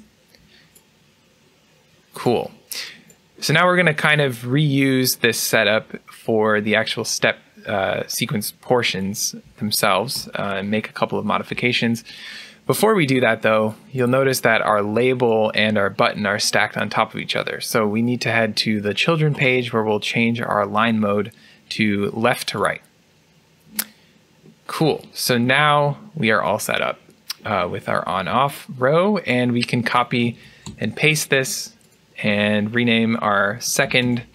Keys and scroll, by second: 14.5 typing, 30.3 ctrl+c, 30.5 ctrl+v, 33.4 BackSpace.